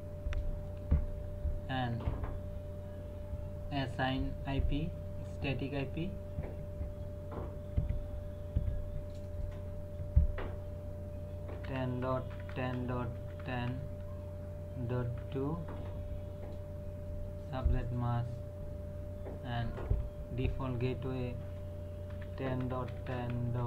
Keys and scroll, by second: 11.5-13.7 typing, 15.2 KP_2, 22.1-23.6 typing.